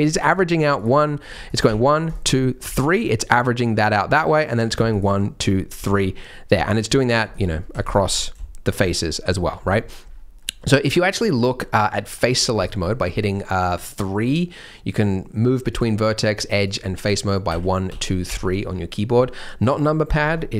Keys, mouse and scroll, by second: 0.7 shift+click, 1.4 click, 2.0 shift+click, 2.8 shift+click, 4.0-4.4 scroll down 3, 4.6 click, 4.9 shift+click, 5.6 shift+click, 6.4 scroll up 3, 7.1 shift+click, 7.5 shift+click, 8.1-8.6 scroll down 4, 8.6 shift+click, 9.3-10.0 scroll up 4, 10.0-10.3 scroll down 2, 10.3 middle click, 11.6-12.5 scroll up 5, 12.5 click, 15.6 click, 16.1 click, 17.4 1, 17.8 2, 18.2 3.